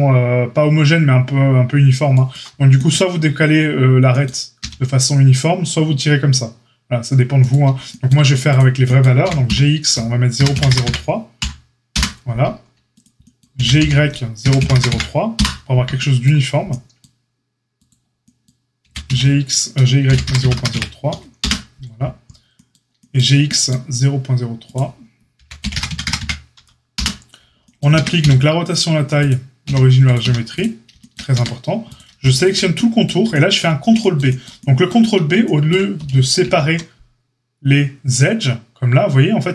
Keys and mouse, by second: 4.5 s, 9.2 g, 12.8 click, 13.0-16.1 middle drag, 13.5 g, 16.1-30.2 right drag, 17.8 click, 17.8 middle click, 18.8 g, 25.3 g, 27.9 Tab, 28.1 q, 29.1 click, 29.1 middle click, 29.6 q, 30.2 q, 31.3 Tab, 31.8 click, 32.1 alt+shift+click, 32.3 alt+shift+click, 33.4-39.5 middle drag, 36.4 ctrl+b.